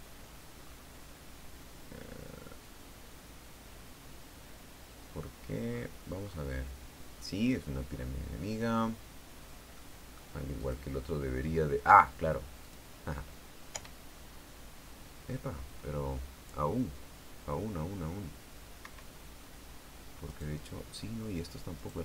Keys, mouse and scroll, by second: 0.2 middle click, 0.6 scroll down 2, 1.4 scroll up 2, 6.4-7.4 scroll up 2, 7.4-7.8 scroll down 1, 7.8 scroll up 1, 8.0-9.0 scroll down 1, 10.5 middle click, 11.3 click, 13.4 click, 14.4 p, 19.5 Escape, 21.0 right click.